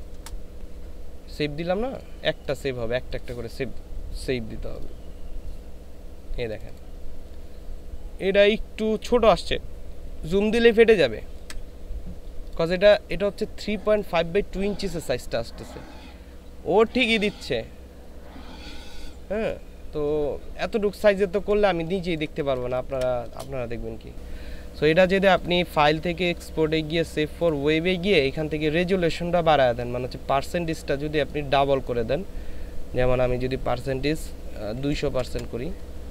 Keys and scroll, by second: 0.1 Return, 21.2 ctrl+space, 34.8 KP_2, 35.1 KP_0.